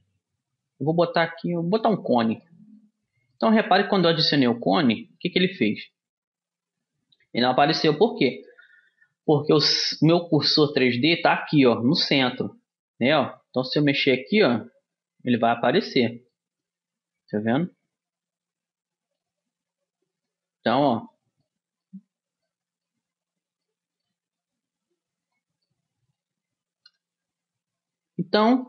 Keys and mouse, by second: 2.6-11.6 middle drag, 13.6-15.4 drag, 16.5-18.5 middle drag, 20.5-21.6 drag, 21.6 middle click, 25.2-26.8 middle drag, 27.4 middle click, 28.2-28.6 middle drag.